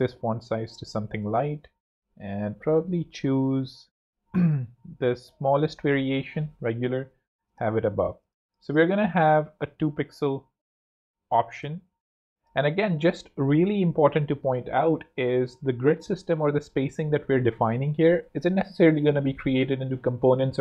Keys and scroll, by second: 6.6 Up, 11.2 2, 12.4 Return.